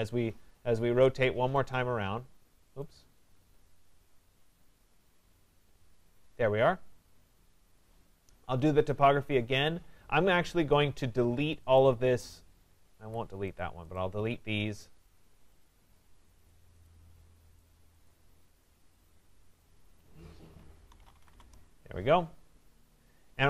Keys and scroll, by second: 9.5 Escape, 21.4 Return.